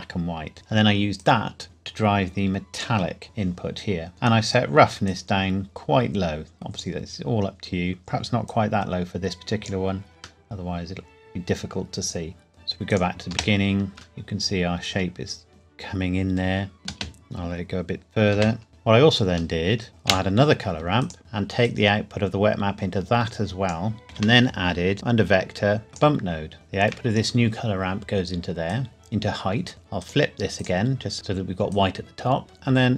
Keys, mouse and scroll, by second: 1.2 click, 5.1 click, 10.5 middle click, 12.9 click, 13.3 space, 13.9 shift+middle click, 16.8 space, 18.7 shift+middle click, 19.6 shift+middle click, 19.9 click, 20.1 shift+d, 21.0 click, 24.1 shift+a, 25.9 click, 26.5 shift+middle click, 28.7 click, 31.7 click.